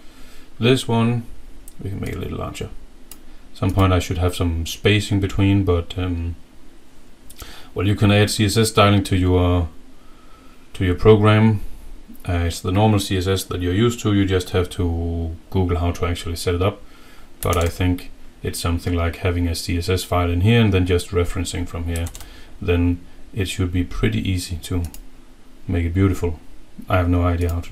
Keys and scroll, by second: 17.6 alt+Tab, 22.2 alt+Tab.